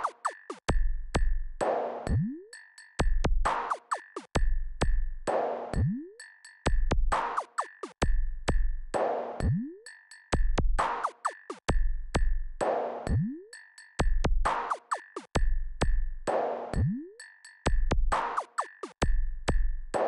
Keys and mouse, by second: 7.1 click, 10.7 click, 12.1-12.8 drag, 17.0 click.